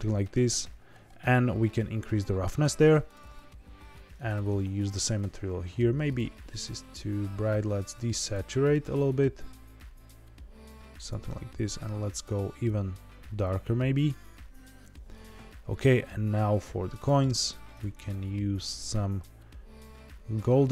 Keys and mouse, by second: 1.2-2.6 drag, 3.0 click, 4.2 click, 12.1 click, 17.0 click.